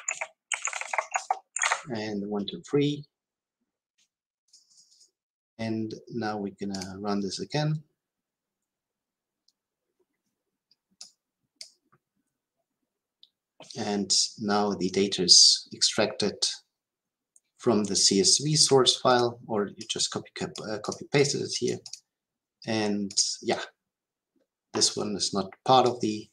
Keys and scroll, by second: 6.7 shift+F10.